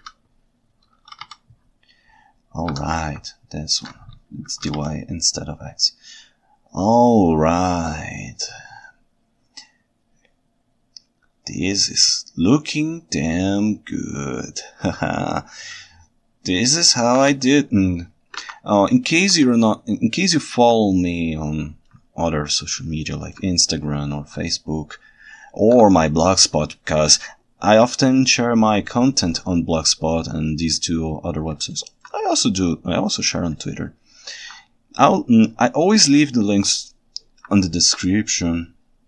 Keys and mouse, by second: 0.1 x, 1.2 y, 2.8 Escape, 3.3 ctrl+shift+middle click, 4.5 r, 4.7 y, 18.4 alt+a, 19.3 ctrl+Tab, 20.9-21.9 ctrl+alt+right drag, 23.0-23.4 ctrl+alt+right drag, 24.5-25.2 ctrl+shift+middle drag, 25.2-25.7 ctrl+shift+right drag, 25.3 ctrl+shift+middle click, 26.1-26.6 ctrl+alt+middle drag, 28.9-29.4 ctrl+alt+right drag, 31.7-32.1 ctrl+alt+right drag, 33.8 ctrl+alt+right click, 36.9-37.4 ctrl+alt+right drag.